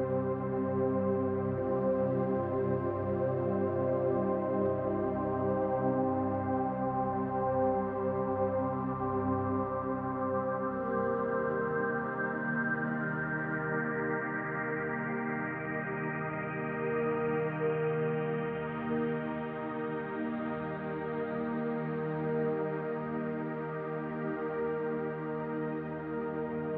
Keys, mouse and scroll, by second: 0.0 middle click, 0.5 click, 1.9 click, 3.1 click, 13.5 click, 18.1 click, 21.8 middle click, 22.7 scroll up 1, 23.1 shift+middle click, 24.4 click, 25.2-25.8 scroll down 2, 26.6 click.